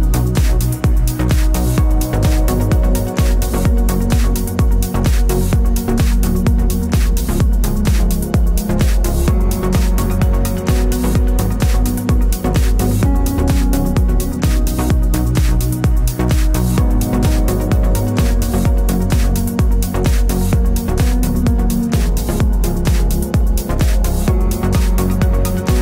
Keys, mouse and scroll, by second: 0.4 middle click, 1.0 click, 1.0 g, 1.8 click, 1.8 g, 2.6 g, 3.4 click, 3.5 g, 4.8 click, 5.1 g, 5.7-7.2 middle drag, 7.2 click, 7.6-10.1 middle drag, 7.9 g, 10.1 click, 10.2 g, 11.2-16.2 middle drag, 12.4 Tab, 15.4 shift+d, 16.2 click, 17.1 r, 19.8 g, 20.6-24.6 middle drag, 20.9 g, 23.1 r, 24.6 click, 24.6-25.8 middle drag.